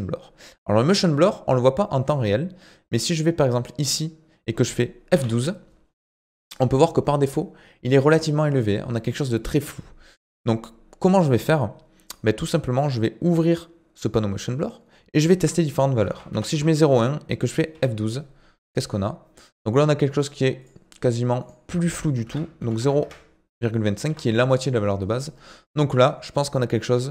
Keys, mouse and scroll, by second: 0.9-4.0 drag, 6.1 F12, 13.3-17.9 drag, 20.7 F12, 21.4-27.1 drag.